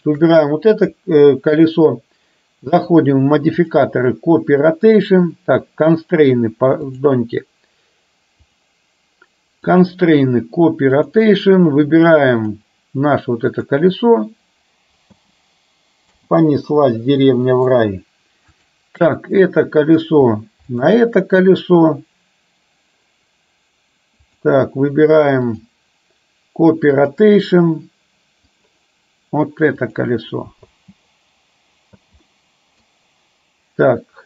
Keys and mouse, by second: 2.8 click, 3.6-5.3 drag, 7.0 click, 8.5 click, 9.8-11.3 drag, 15.1 space, 16.1 space, 16.5-17.8 middle drag, 18.6 click, 19.3-20.1 middle drag, 20.8 shift+click, 24.3 click, 25.5-27.3 drag, 28.6 click, 30.8 space, 32.0 space, 32.3-33.0 middle drag.